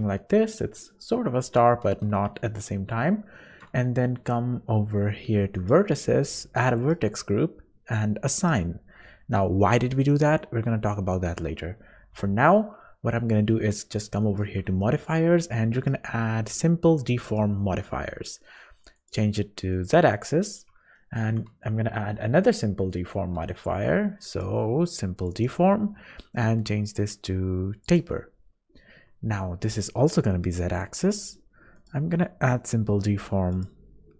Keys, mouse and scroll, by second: 2.4 shift+middle click, 5.6 click, 6.8 click, 9.8 scroll down 2, 11.7 scroll up 2, 12.2 Tab, 12.5 scroll down 2, 14.2 click, 14.8 shift+middle click, 15.7 click, 18.0 scroll up 1, 18.3 middle click, 19.0 click, 20.4 scroll up 2, 21.0 shift+middle click, 21.6 q, 24.3 click, 27.9 click, 30.0 click.